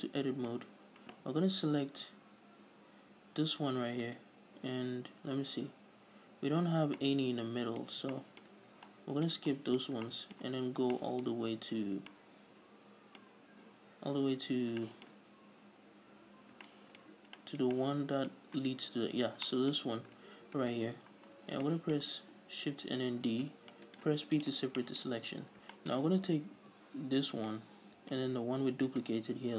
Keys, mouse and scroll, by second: 0.9-4.2 scroll up 2, 4.2 scroll up 1, 4.4 alt+right click, 7.3-20.9 middle drag, 11.0 scroll down 2, 14.5 scroll up 2, 14.8-15.1 scroll down 2, 15.6-16.9 scroll down 2, 16.9 scroll down 1, 19.1 scroll down 2, 19.3-19.8 scroll up 2, 20.2-20.9 scroll up 2, 20.9 alt+shift+right click, 21.4 middle click, 21.4-21.7 scroll down 2, 22.0-24.3 shift+middle drag, 23.6 shift+d, 24.3 right click, 24.4 p, 25.1-27.8 shift+middle drag, 25.4 scroll up 3, 26.0 scroll up 1, 26.9 Tab, 27.8 right click, 29.3 shift+right click.